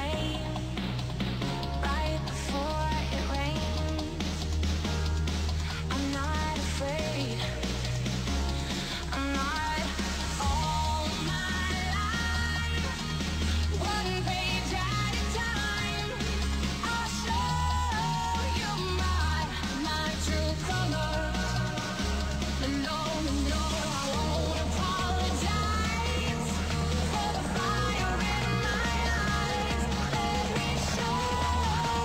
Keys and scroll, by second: 1.5 ctrl+s, 23.7 space, 29.5 ctrl+s.